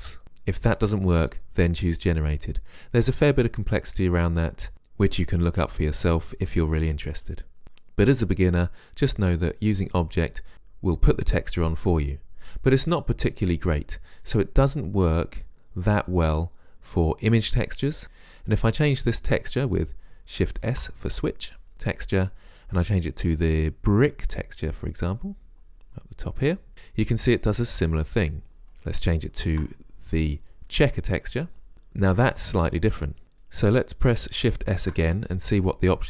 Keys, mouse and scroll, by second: 12.5 middle click, 18.0-20.5 right drag, 20.7 shift+s, 28.6 click, 29.4 shift+s, 33.5 click, 34.8 shift+s.